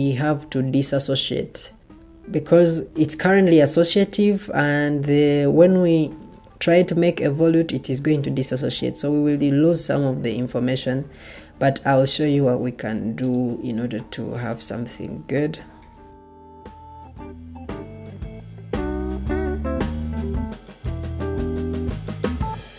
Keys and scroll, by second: 11.4 Escape.